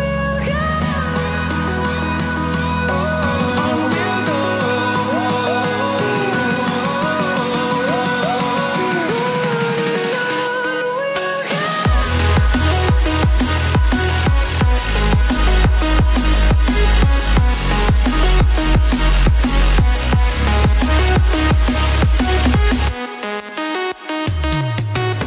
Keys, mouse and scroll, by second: 0.3 scroll up 1, 1.1 click, 2.1 scroll down 1, 2.7 ctrl+c, 2.9 typing, 3.9 click, 5.8 ctrl+c, 6.0 ctrl+v, 6.8 click, 8.3 ctrl+c, 8.5 ctrl+v, 9.1 click, 11.4 Down, 12.5 ctrl+c, 12.7 ctrl+v, 14.2 click, 16.1 scroll down 1, 16.7-17.4 scroll up 1, 17.4 click, 19.1-19.9 scroll up 1, 19.9 click, 21.6 click, 23.6 scroll up 1, 24.5 click.